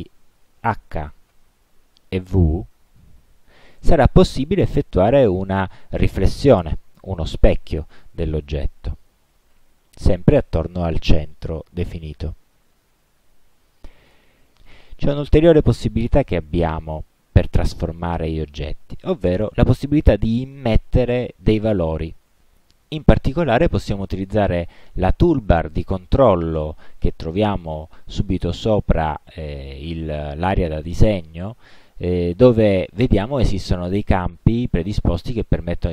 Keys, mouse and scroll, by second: 1.4 h, 3.1 v, 9.6 h, 14.7 click.